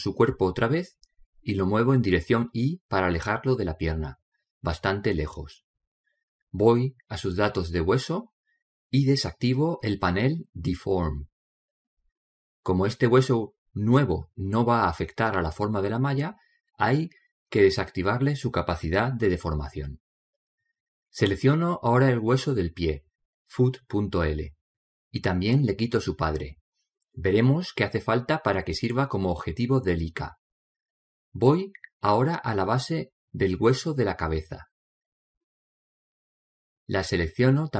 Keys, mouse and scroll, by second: 0.6-2.1 middle drag, 2.1-5.7 drag, 3.2-4.9 middle drag, 5.2 middle click, 6.0 middle click, 7.9-8.6 scroll up 1, 11.5-12.7 scroll down 1, 12.7 click, 21.9-22.5 scroll up 1, 22.5-25.6 middle drag, 25.1 right click, 27.2 click, 32.4-35.9 middle drag, 37.0 right click.